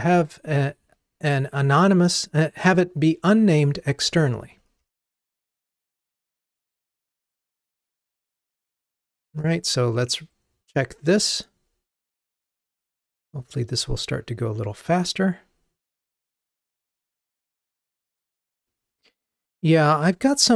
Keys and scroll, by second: 9.3 ctrl+r.